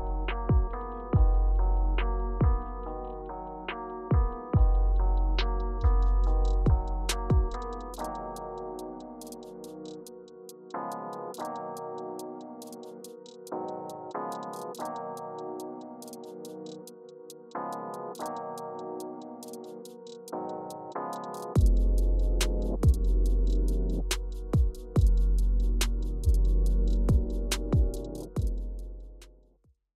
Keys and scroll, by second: 2.3 alt+h, 2.6 alt+v.